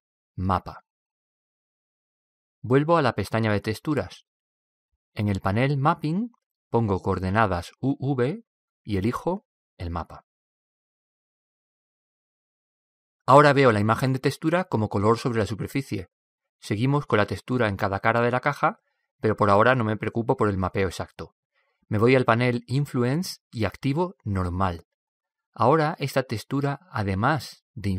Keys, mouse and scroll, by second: 3.6-6.5 drag, 7.0-10.5 drag, 14.7-16.4 drag, 23.7-25.7 middle drag, 26.8-27.9 drag.